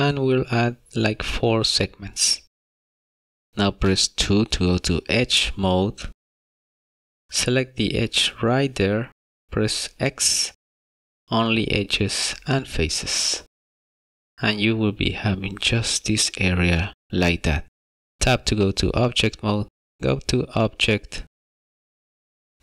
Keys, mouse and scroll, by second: 3.7 2, 9.1 click, 9.8 x, 18.5 Tab, 20.8 click.